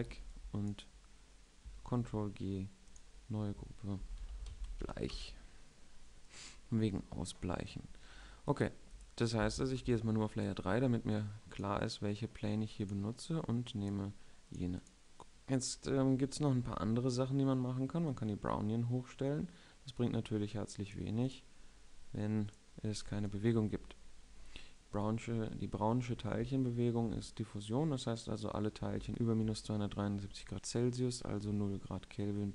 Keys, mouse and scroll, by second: 0.4 n, 0.8 b, 2.6 ctrl+g, 3.6 click, 9.2-15.1 right drag, 10.3 3, 15.1 z, 18.8-20.8 right drag, 29.6-32.5 middle drag.